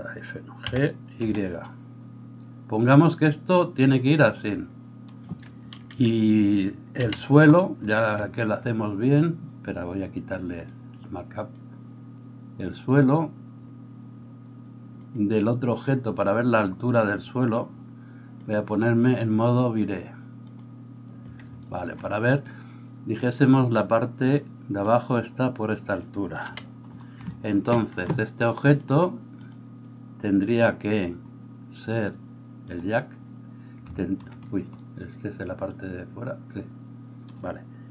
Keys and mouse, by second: 0.7 g, 5.9 KP_3, 7.0 KP_1, 15.0-20.5 drag, 16.8 middle click, 16.8 right click, 20.5-28.8 middle drag, 26.5 KP_1, 28.8-33.9 drag, 30.4-37.9 middle drag, 30.4-33.9 right drag.